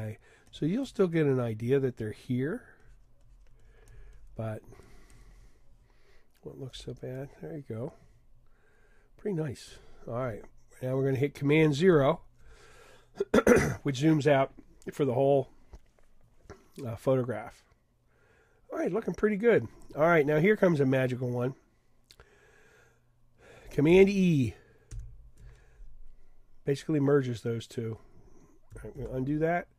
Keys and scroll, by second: 11.9 super+0, 24.9 super+e, 28.9 super+z.